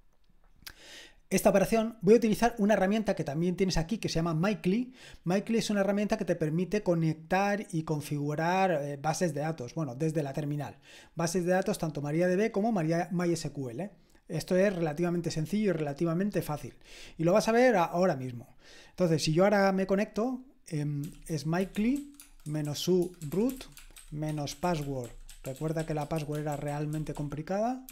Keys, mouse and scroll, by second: 3.9 click, 9.3-10.7 scroll down 1, 10.7-16.5 scroll down 1, 21.0-27.9 typing.